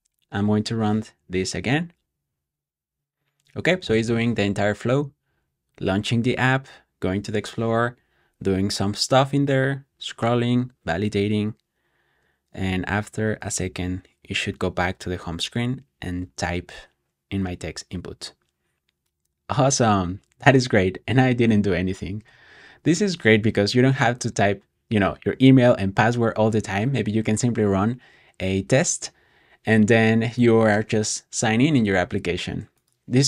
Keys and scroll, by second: 17.2 typing.